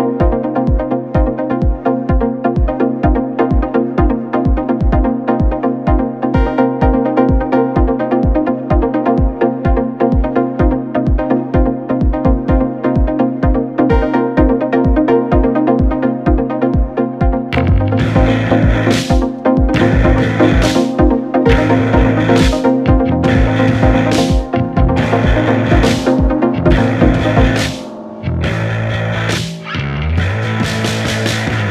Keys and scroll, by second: 10.8 ], 12.7 ], 23.5 4, 26.2 3, 27.6 4.